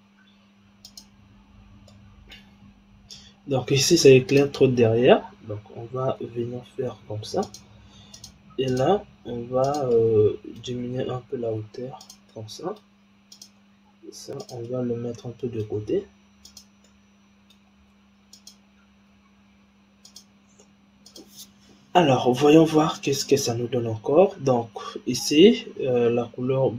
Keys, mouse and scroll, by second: 0.7 click, 1.8-2.6 middle drag, 2.6-4.2 scroll down 7, 4.2 click, 4.9-6.1 scroll up 4, 6.2 g, 8.1 click, 8.6 click, 9.1 g, 9.9-10.9 middle drag, 10.9 g, 12.3-13.3 middle drag, 13.3 click, 13.7 g, 14.7-15.8 middle drag, 15.8 g, 16.8-17.8 middle drag, 17.8 g, 18.9 g, 21.1 click, 22.1-23.0 scroll up 6, 23.0-23.7 scroll down 2, 23.7-25.0 scroll down 2, 25.0 click.